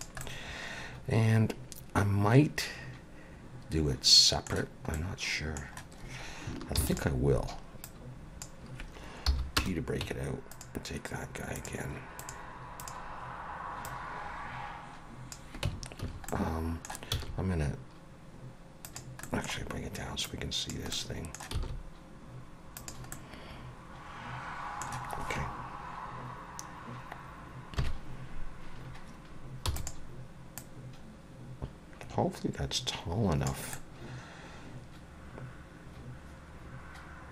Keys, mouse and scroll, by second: 0.2 middle click, 4.9 middle click, 6.8 shift+d, 7.8 click, 9.3 p, 10.0 Tab, 10.5 click, 11.6 click, 13.8 click, 15.7 Tab, 16.0 a, 16.3 middle click, 17.2 s, 19.2 middle click, 20.2 click, 20.9 middle click, 21.5 s, 23.1 middle click, 27.8 KP_1, 28.9-29.7 scroll up 1, 29.7 e, 30.6 click, 33.7 middle click.